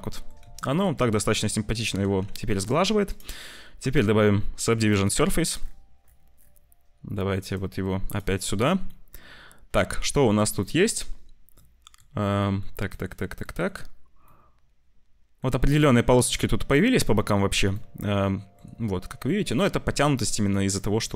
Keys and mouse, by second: 0.4 ctrl+s, 0.6 click, 2.0 ctrl+s, 3.0-4.9 drag, 7.4 click, 8.9-9.9 drag, 10.6 click, 11.6 click, 12.4 click, 12.8 click, 13.3 click, 14.2-15.3 drag, 16.8 click, 17.8 shift+click, 20.2 click, 20.9 Tab.